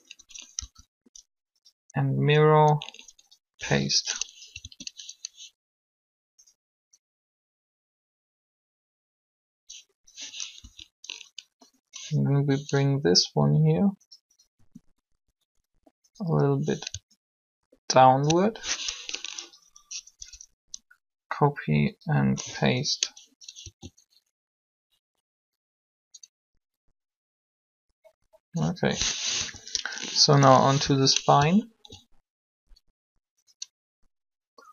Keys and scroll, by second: 0.0 Up, 0.5 Down, 2.2 Down, 3.3 Up, 4.6 alt+a, 10.6 Up, 13.3 r, 20.1 Up, 23.6 alt+a, 29.3 3, 30.2 7.